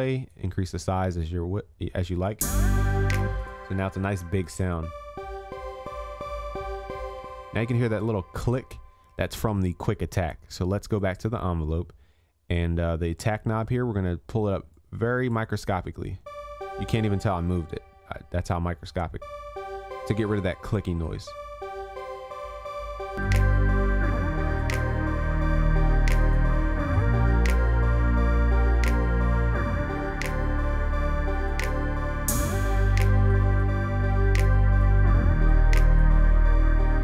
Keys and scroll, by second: 25.4 ctrl+s.